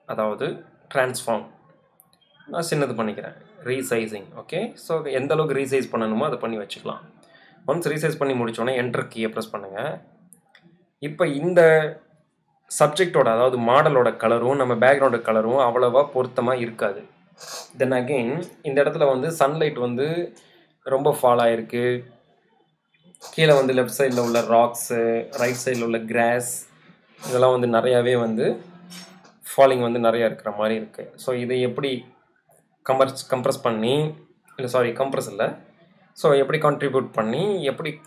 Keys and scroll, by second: 2.4 super+0, 7.8 Return, 9.3 e, 19.3 v, 34.2 super+0.